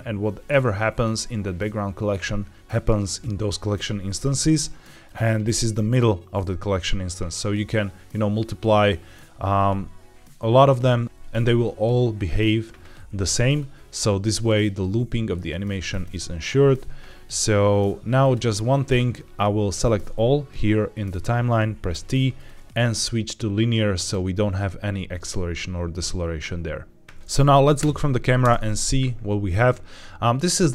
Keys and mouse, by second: 5.0 click, 13.5 click, 18.2 click, 19.6 a, 21.8 t, 27.7 KP_0, 28.3 space.